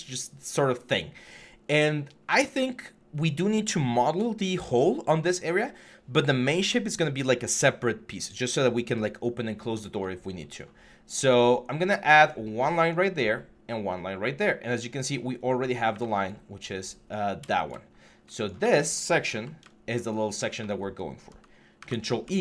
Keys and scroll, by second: 19.1 f, 21.5 ctrl+e.